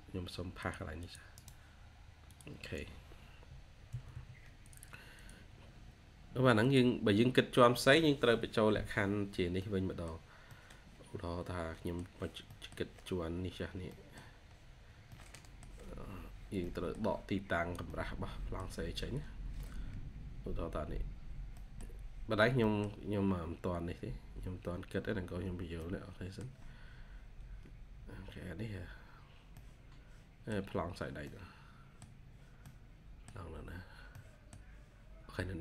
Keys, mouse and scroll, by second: 0.9 double click, 1.2 right click, 3.1-3.8 scroll down 1, 3.8 Escape, 4.0 Escape, 5.4-6.4 scroll down 1, 7.3-7.7 scroll down 1, 7.7 middle click, 8.6 scroll down 1, 9.5 middle click, 13.0-13.4 scroll up 1, 13.8 middle click, 14.0 scroll down 1, 14.6-15.0 scroll up 1, 15.0 middle click, 16.0-16.5 scroll down 1, 16.5 middle click, 17.3 scroll down 1, 17.6 scroll up 1, 17.7 middle click, 19.2 scroll up 1, 21.5 middle click, 22.5 middle click, 23.1 scroll down 1, 25.2-25.7 scroll up 1, 25.7 middle click, 26.8 scroll up 1, 28.1-28.5 scroll down 1, 29.4 middle click, 32.2-32.5 scroll down 1, 32.5 middle click, 34.0 middle click, 35.0 scroll up 1.